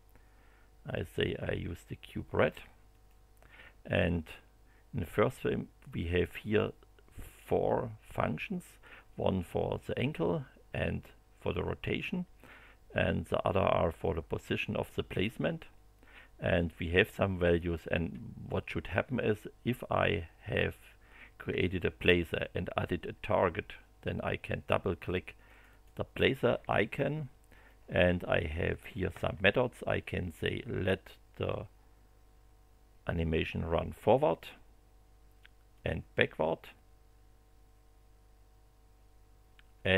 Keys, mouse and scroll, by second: 1.0 click, 2.9 click, 25.4 click, 27.6-29.0 drag, 30.8 click, 35.7 click.